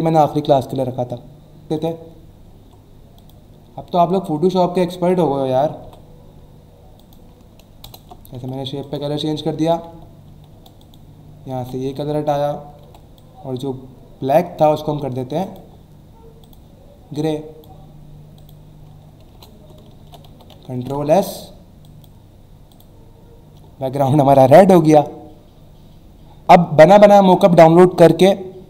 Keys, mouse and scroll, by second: 1.7 click, 3.2 click, 3.8-4.1 alt+scroll up 1, 5.1 click, 7.0 click, 7.8 alt+BackSpace, 8.3 v, 8.8 click, 9.2 e, 9.9 shift+e, 10.3 shift+e, 10.8 click, 11.6 v, 12.0 alt+scroll up 1, 12.8 m, 13.2 click, 15.4 click, 17.2 click, 18.3 click, 19.3 alt+BackSpace, 20.0 ctrl+d, 20.5 v, 20.7 ctrl+s, 21.8 click, 22.7 click.